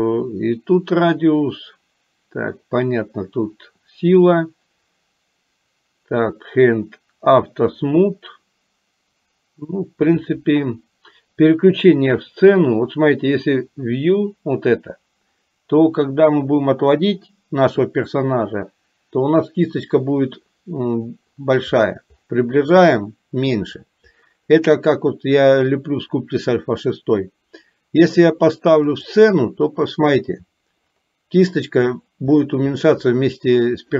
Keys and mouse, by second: 29.0 click.